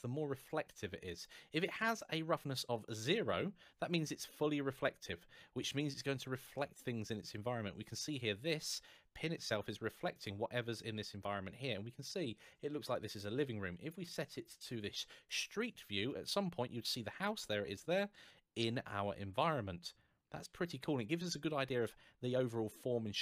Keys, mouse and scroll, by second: 4.1-4.5 scroll up 1, 4.6 middle click, 9.9 click, 12.7 click, 15.0 click, 15.9 middle click, 17.5 middle click, 22.5 middle click.